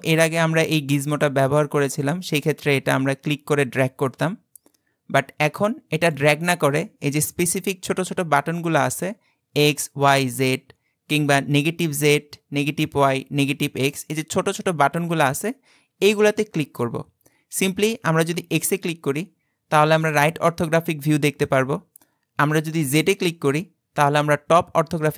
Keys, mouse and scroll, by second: 0.0 click, 18.6 click, 22.9 click.